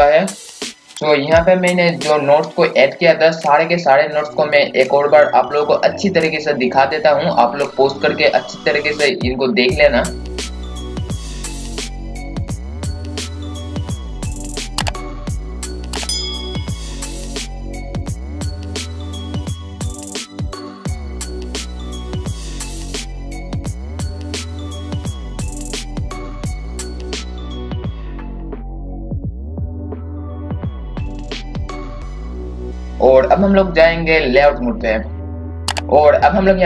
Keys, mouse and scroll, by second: 0.0-0.9 scroll up 1, 0.9-4.5 scroll down 1, 4.5-8.6 drag, 10.1 scroll up 1, 11.3-27.7 drag, 27.7 scroll down 1, 28.6 click, 29.8-30.3 scroll down 1, 30.7-32.9 drag, 32.9-33.6 scroll up 1, 33.6-35.1 scroll down 1, 35.1 KP_6.